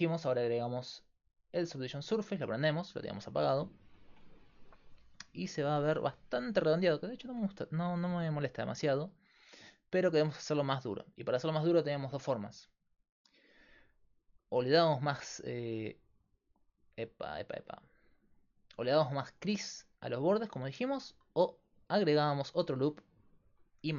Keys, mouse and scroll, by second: 1.7-12.1 drag, 12.1 Tab, 14.4-20.3 right drag, 19.8-23.9 drag.